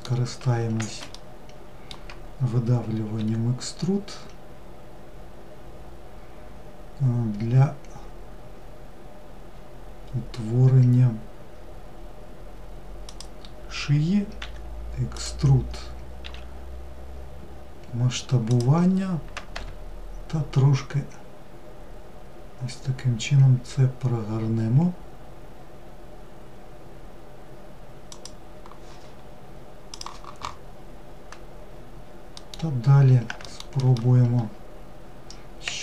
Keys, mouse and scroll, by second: 2.0 e, 31.0-32.2 middle drag, 32.5 alt+middle drag, 34.4 e.